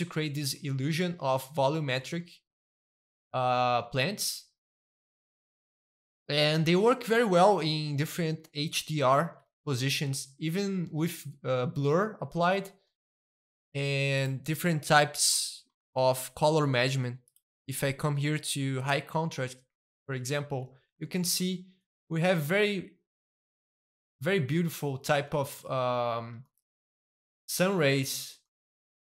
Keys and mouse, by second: 0.0 middle click, 0.5-1.5 shift+middle drag, 1.6-3.8 shift+middle drag, 3.8-5.2 shift+middle drag, 5.2 a, 5.8-7.5 middle drag, 7.6-8.6 shift+middle drag, 8.6-10.0 shift+middle drag, 10.2-11.9 shift+middle drag, 11.9-14.1 shift+middle drag, 14.1 click, 14.9-17.0 middle drag, 17.2-19.3 drag, 19.9 middle click, 20.3-21.4 shift+middle drag, 21.5-25.1 shift+middle drag, 25.2-26.3 shift+middle drag, 26.4 shift+middle click, 27.5-29.0 shift+middle drag.